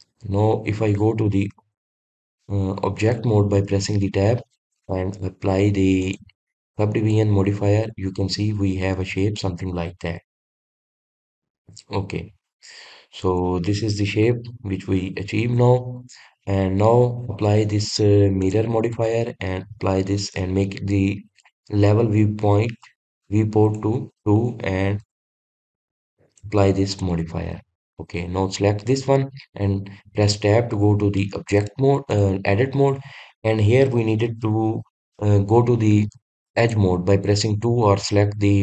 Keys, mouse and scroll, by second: 8.7-10.5 middle drag, 10.5-11.0 scroll up 1, 11.0-11.4 scroll down 1, 11.4-12.6 middle drag, 12.6-13.2 scroll up 1, 13.2-15.0 middle drag, 15.0 scroll up 1, 15.1-18.3 shift+middle drag, 19.2-22.2 drag, 24.5-25.3 drag, 25.8 click, 26.4 click, 26.7 click, 27.1-28.3 drag, 28.9 click, 31.1 Tab, 32.0 middle click, 32.9 click, 33.6-34.0 scroll up 2, 37.4-38.6 drag.